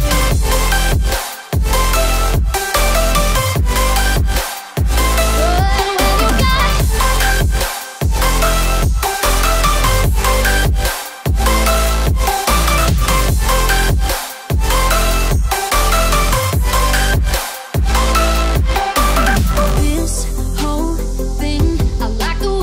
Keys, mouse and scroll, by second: 1.9-3.4 typing, 3.9 Return, 4.9-8.7 typing, 9.9 click, 12.5-17.2 alt+shift+drag, 17.2 Down, 17.8 Right, 18.6 Left.